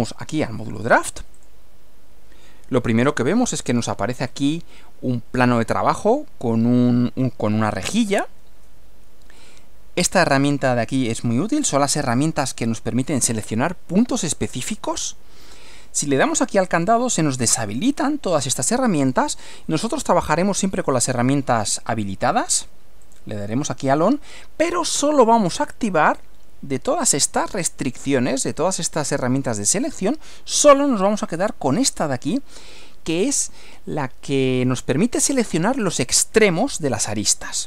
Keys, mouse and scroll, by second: 1.3 click, 3.4-4.1 scroll down 2, 4.1 scroll up 2, 4.3-4.7 scroll down 2, 10.0-11.5 drag, 16.2 click, 23.1 click, 31.1 click, 32.7 click.